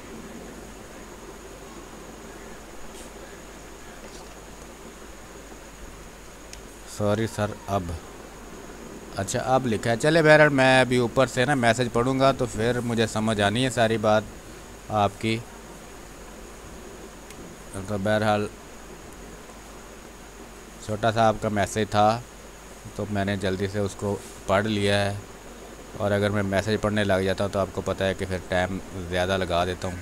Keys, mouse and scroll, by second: 1.0 space, 1.3 click, 1.5 space, 5.0 space, 5.3 click, 5.5 space, 9.1-11.1 drag, 11.1 space, 11.2 click, 11.6 space, 13.9-16.6 drag, 16.6 x, 16.8 click, 17.2 space, 17.3-21.9 drag, 17.7 space, 21.9 space, 22.6-25.1 drag, 25.1-26.7 drag, 26.7 space, 27.1 alt+click, 28.5 ctrl+click, 29.7 click.